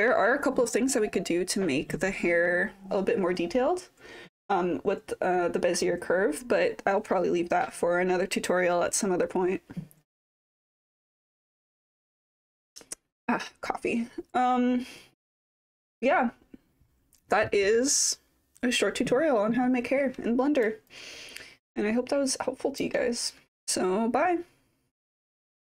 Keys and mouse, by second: 20.9-22.8 alt+drag.